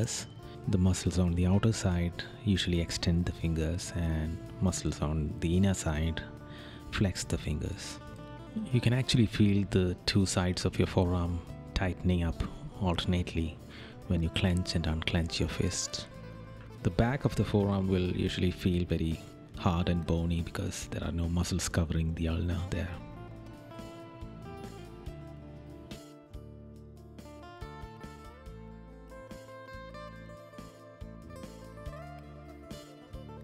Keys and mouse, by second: 0.1 right click, 3.7 right click, 7.3 right click, 9.6 right click, 19.0 right click, 24.7 right click, 26.4 right click, 27.5 right click, 29.0 right click, 30.4 right click, 31.0 right click, 33.1 right click.